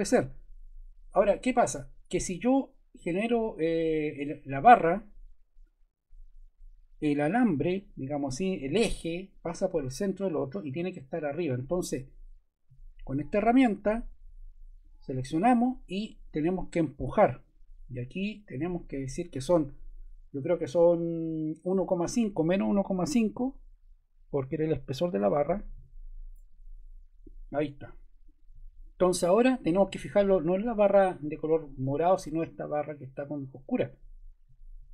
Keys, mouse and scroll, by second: 23.1 -, 23.8 1, 24.9-26.3 typing.